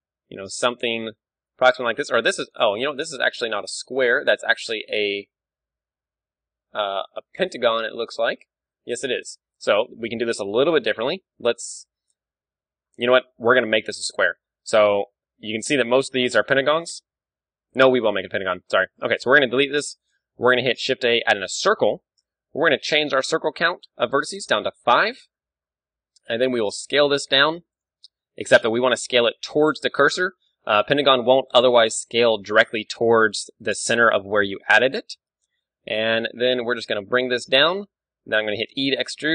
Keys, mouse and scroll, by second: 0.7 s, 1.6-3.4 drag, 7.8-10.5 middle drag, 9.6 KP_7, 10.2 x, 10.5 click, 10.6 middle click, 12.8-18.2 middle drag, 12.8 scroll down 1, 18.4-20.4 middle drag, 19.2 x, 20.4 shift+a, 22.7 F6, 25.4-27.0 middle drag, 26.1 s, 26.6-28.4 drag, 27.2-29.0 middle drag, 27.4 s, 28.1 ctrl+z, 28.9 ., 29.0-30.5 right drag, 29.5 s, 30.5 middle click, 33.7-35.4 drag, 35.0 KP_1, 35.6-37.4 middle drag, 36.4 g, 37.5-39.1 drag, 38.1 e.